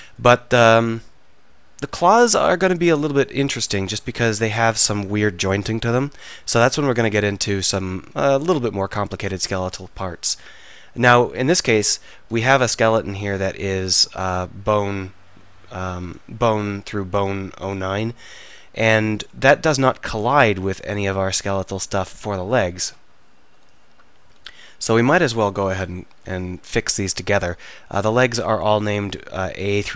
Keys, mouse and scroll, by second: 2.3-9.2 middle drag, 11.2 a, 11.6 a, 12.0 alt+r, 16.0-19.1 drag, 19.1-20.2 middle drag, 19.4 Tab, 20.8-23.6 drag, 21.2 Tab, 23.6 alt+h, 26.7 middle click, 26.9 drag, 27.1-29.9 middle drag.